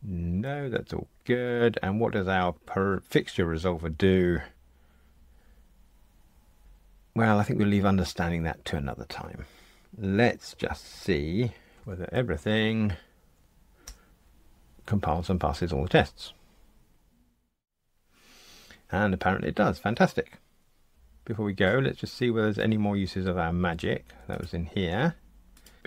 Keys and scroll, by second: 11.8 ctrl+alt+r, 21.5 super+e.